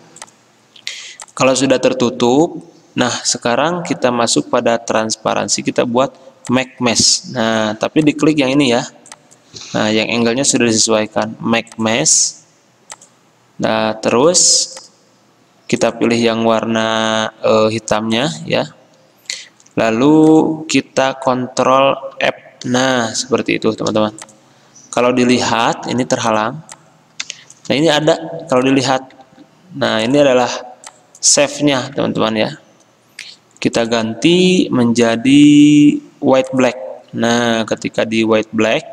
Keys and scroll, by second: 7.6 ctrl+z, 9.8 ctrl+z, 22.3 ctrl+f, 24.0 c, 26.0 v, 29.4 ctrl+z, 31.9 ctrl+z.